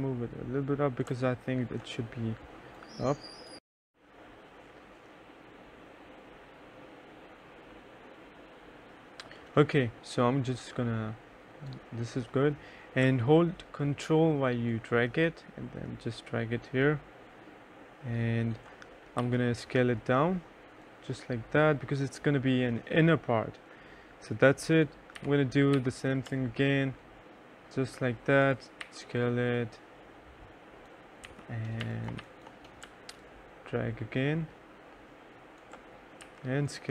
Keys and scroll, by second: 3.6 F9, 19.3 t, 25.3 t, 25.8 e, 28.9 t, 31.3 e, 31.9 2, 32.3 1, 36.3 t.